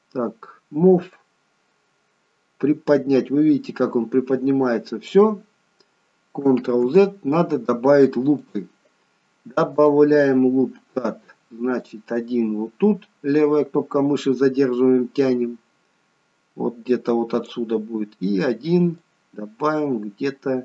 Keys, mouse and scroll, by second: 1.1 click, 6.7 ctrl+z, 8.4 click, 9.7 click, 19.0 click.